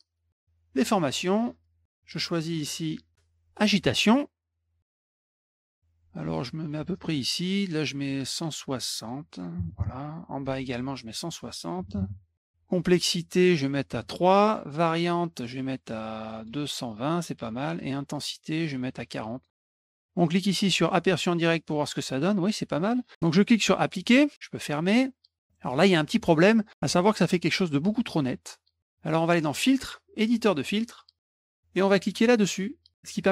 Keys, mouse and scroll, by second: 3.6 click, 4.8-6.0 drag, 6.9 click, 8.8 click, 11.1 click, 13.1 click, 15.3 click, 15.9 click, 18.1 click, 19.3 click, 19.6 BackSpace, 20.8 click, 21.5 click, 23.8 click, 24.8 click, 25.4 middle click, 29.5 click, 30.5 click.